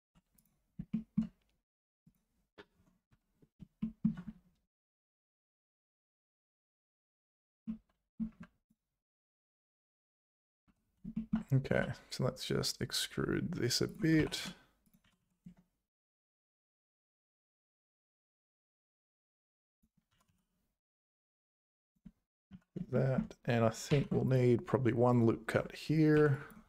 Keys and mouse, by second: 0.0 alt+h, 0.3 click, 0.9 shift+middle click, 2.8 Tab, 3.2 `, 3.8 shift+click, 7.6 click, 8.3 3, 10.7 `, 11.1 shift+middle click, 11.7 e, 14.2 s, 15.0 g, 19.7 e, 20.1 g, 22.5 z, 23.0 shift+middle click, 23.0 shift+click, 23.9 ctrl+r, 26.2 1, 26.3 click.